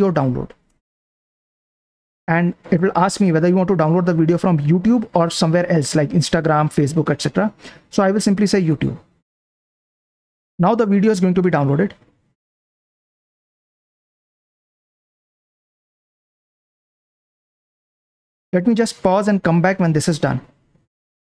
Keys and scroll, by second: 0.7 Return, 2.7 Down, 3.0 Up, 8.7 Return.